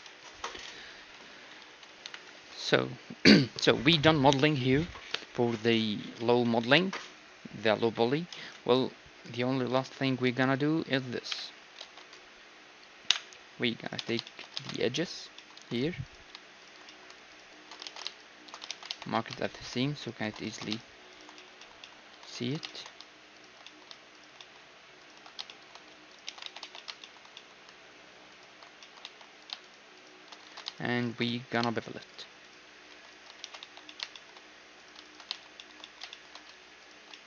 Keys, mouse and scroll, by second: 0.7 z, 1.2 Tab, 1.5-3.5 middle drag, 1.6 z, 2.1 KP_1, 2.4 ctrl+s, 9.8-11.9 middle drag, 10.3 z, 11.4 KP_Divide, 11.9 ctrl+s, 13.1 KP_1, 13.9-16.1 right drag, 14.1 Tab, 14.3-15.4 drag, 14.6 ctrl+Tab, 15.4 middle click, 15.5-18.9 drag, 16.1-18.9 middle drag, 17.9 ctrl+z, 18.7 ctrl+e, 18.9-19.9 right drag, 19.2-21.2 drag, 20.1-21.9 right drag, 20.6 ctrl+z, 21.6 click, 21.9 middle click, 26.3 ctrl+e, 26.6 a, 26.9-30.6 drag, 26.9-28.0 middle drag, 28.4-30.7 middle drag, 29.1 a, 30.6 ctrl+z, 30.6 right click, 31.3-32.5 drag, 31.3-32.5 middle drag, 32.5-37.0 right drag, 32.7 shift+e, 33.5 ctrl+e, 33.9 click, 34.2 middle click, 34.8-37.2 drag, 37.0-37.2 middle drag.